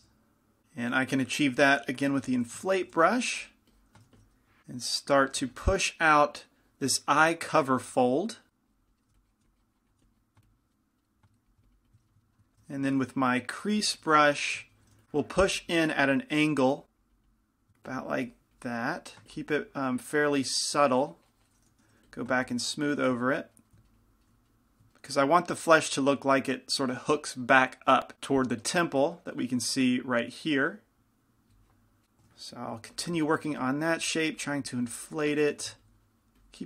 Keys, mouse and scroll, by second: 2.4 i, 2.4 f, 3.2 f, 3.6-5.2 drag, 3.6-5.2 right drag, 4.3 shift+f, 5.6 f, 6.3-10.8 drag, 6.3-7.9 right drag, 8.5-9.8 right drag, 9.2 f, 9.5 f, 10.1 f, 13.3-15.6 typing, 14.7 middle click, 16.2-21.9 drag, 21.9 shift+f, 22.6-24.5 drag, 23.4 middle click, 24.5-33.0 middle drag, 33.0 i, 33.0 f, 33.5 middle click, 33.7 f, 34.3-36.6 drag, 35.5-36.6 middle drag.